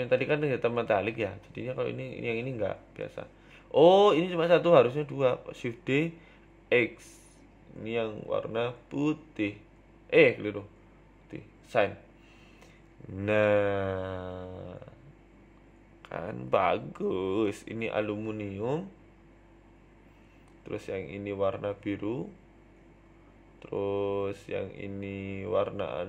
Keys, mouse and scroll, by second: 0.8 shift+middle click, 1.0 Tab, 1.8 middle click, 2.9 shift+d, 6.4 click, 6.9 click, 7.9 click, 8.6 click, 10.2 click, 10.2 scroll down 3, 10.3 Tab, 10.6 shift+middle click, 10.9 middle click, 11.1 scroll down 2, 11.3 middle click, 12.1-13.8 click, 13.3 click, 13.6 click, 14.4 middle click, 14.6-15.0 scroll up 4, 14.9 middle click, 15.1 scroll down 2, 15.3 middle click, 15.6 scroll up 1, 15.9 right click, 16.9 click, 17.3 click, 18.3 middle click, 19.1 right click, 19.6 click, 20.9 middle click, 21.1-21.9 scroll up 5, 21.3 shift+middle click, 21.6 middle click, 22.0 middle click, 22.4 middle click, 22.4 shift+middle click, 22.8 middle click, 22.8 shift+middle click, 23.0 shift+middle click, 23.5 right click, 24.3 click.